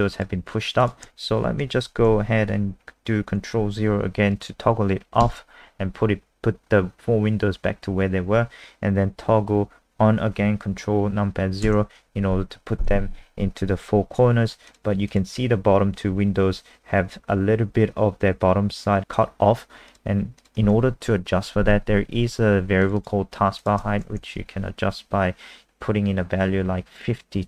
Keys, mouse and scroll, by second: 0.2 click, 0.8 click, 5.3 ctrl+KP_0, 14.7 click, 17.8 click, 23.0 click, 23.6 click, 24.1-25.5 typing.